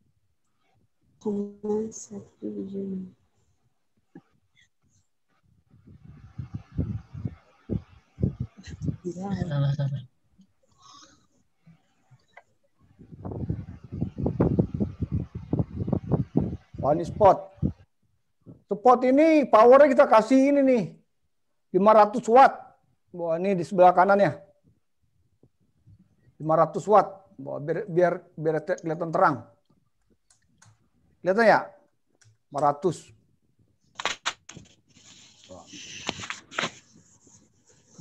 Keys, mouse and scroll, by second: 0.9 click, 1.9-2.3 click, 2.0 click, 2.4 click, 4.7 click, 5.5 middle click, 8.3 scroll down 1, 9.2-9.7 scroll down 1, 11.5 click, 13.1 click, 15.4 click, 36.5 click.